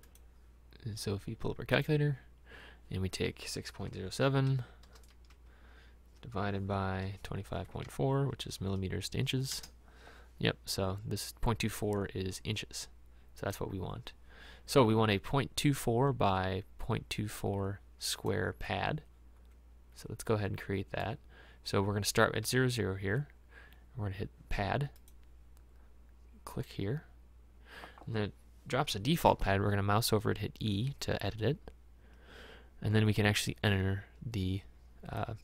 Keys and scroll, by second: 4.3 KP_6, 4.6 KP_Decimal, 4.9 KP_0, 5.4 KP_7, 7.7 KP_2, 7.9 KP_5, 8.4 KP_Decimal, 8.6 KP_4, 31.3 e.